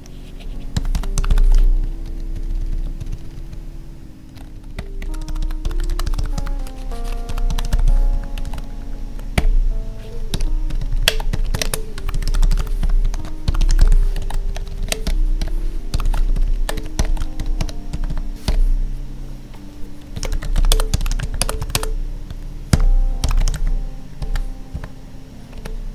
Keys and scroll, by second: 1.4 ctrl+s, 1.8 Right, 2.0 Down, 3.0 ctrl+Down, 4.4 ctrl+s, 8.1 Tab, 8.4 ctrl+s, 10.3 Up, 10.7 ctrl+Right, 11.3 Right, 11.4 space, 11.5 Left, 11.6 space, 14.2 ctrl+s, 14.5 Left, 16.1 ctrl+s, 16.3 ctrl+Right, 17.1 ctrl+s, 17.4 Right, 17.6 Down, 17.9 Tab, 20.7 space, 21.4 space, 21.7 space, 24.7 Tab, 25.6 space.